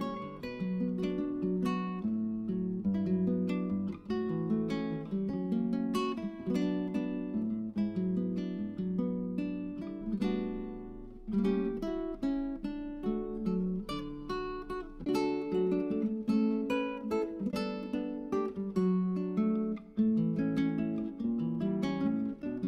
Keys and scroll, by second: 11.4 0.